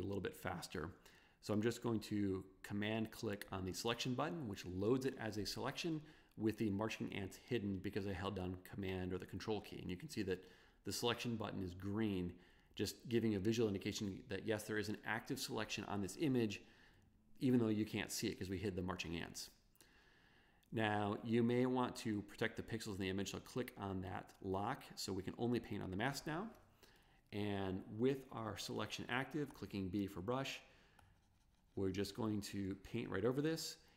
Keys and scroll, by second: 29.6 b.